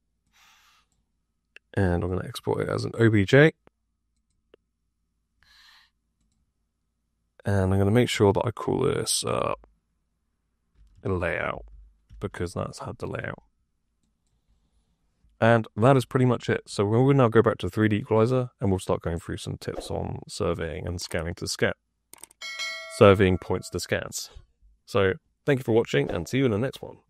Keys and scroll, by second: 10.4-12.0 typing.